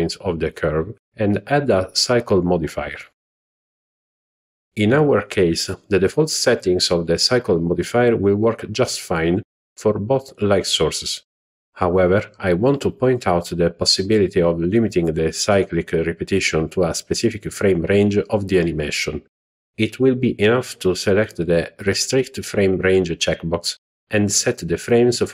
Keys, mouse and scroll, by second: 1.0-2.4 drag, 11.9 click, 12.7 click, 14.0-16.1 drag, 20.2-23.1 drag, 24.1 click.